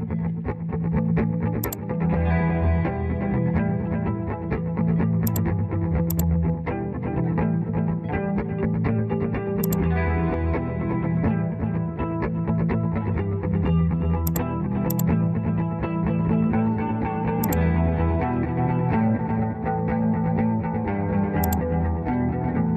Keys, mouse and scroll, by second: 8.4 Return, 16.6 Return.